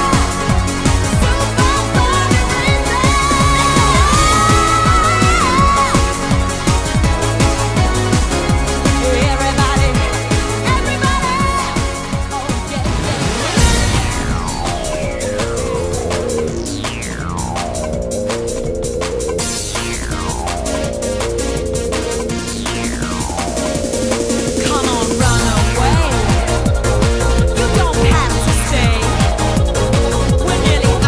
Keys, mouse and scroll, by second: 21.1 click, 27.0 click.